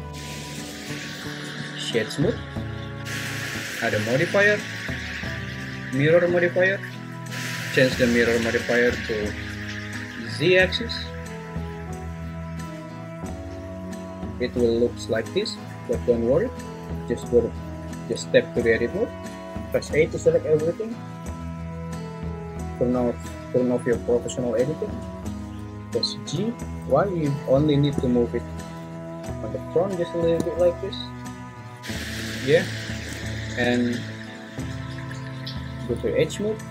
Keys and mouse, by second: 2.0 right click, 3.0 `, 4.7-7.3 drag, 7.3 `, 11.0 click, 17.2 Tab, 18.1 Tab, 19.8 a, 26.3 g, 26.9 y, 31.8 `, 32.2 `, 36.0 2.